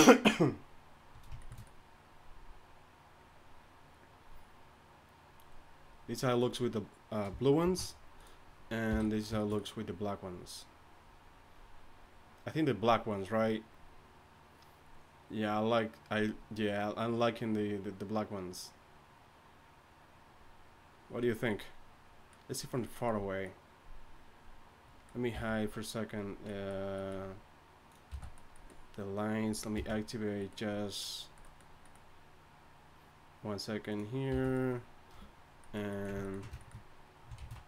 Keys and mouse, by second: 7.6 alt+h, 8.9 h, 25.3 n, 28.1 n, 29.7 n, 34.3 n, 37.5 shift+z.